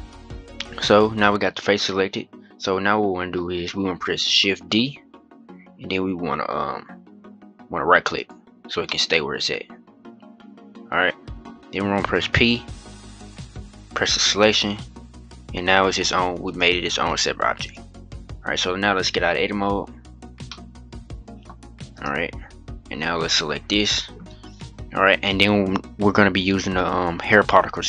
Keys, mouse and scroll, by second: 0.3 middle click, 1.1-1.6 scroll down 1, 1.6-4.5 middle drag, 4.5 shift+d, 8.5-9.0 scroll down 1, 9.0-11.6 middle drag, 11.9 p, 16.2 click, 16.8 click, 17.3 click, 19.4 Tab, 20.2-21.3 middle drag, 21.3 scroll up 1, 21.7 click, 23.0-23.5 drag.